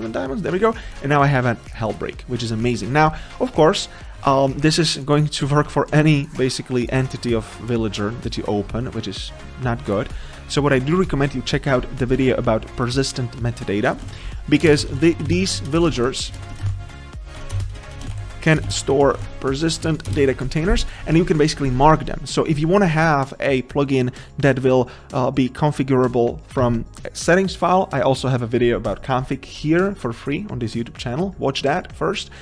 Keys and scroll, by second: 14.1 ctrl+c, 15.7 Return, 17.5 Tab, 18.6 Tab, 18.9 Return, 20.1 Return.